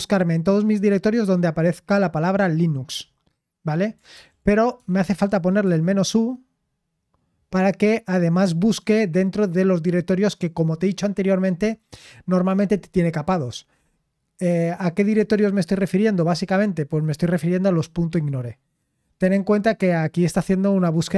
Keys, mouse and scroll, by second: 4.1 ctrl+p, 4.8-5.1 typing, 5.6 Return.